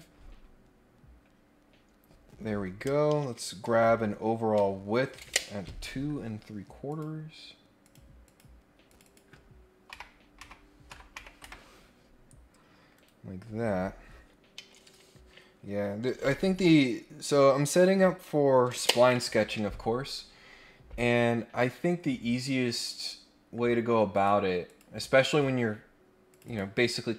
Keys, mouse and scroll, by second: 0.8-1.2 scroll down 1, 1.2-1.6 scroll up 2, 6.9 click, 7.8 click, 8.2 click, 8.9 click, 12.9 Escape, 22.6 scroll down 2, 23.0-23.4 scroll up 2, 24.1 click, 24.6 click, 26.3 click.